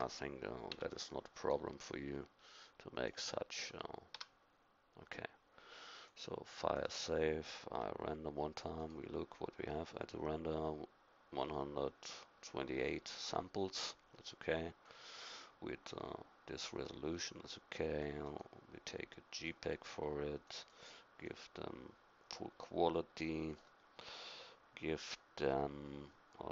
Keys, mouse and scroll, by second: 0.7 e, 1.5 click, 4.2 a.